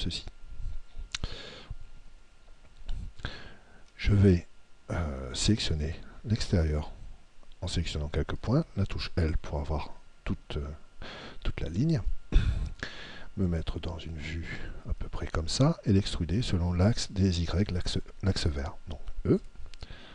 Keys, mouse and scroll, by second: 1.6-5.0 middle drag, 5.8-8.1 right drag, 8.9 l, 10.9-16.4 middle drag, 19.4 e.